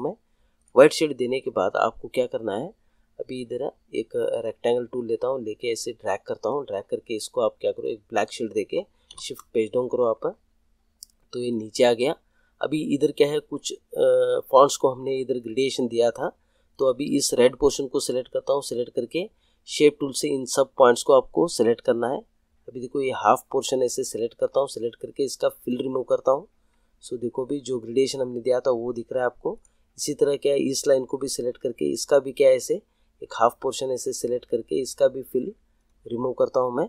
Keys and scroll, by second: 9.0 shift+Page_Down.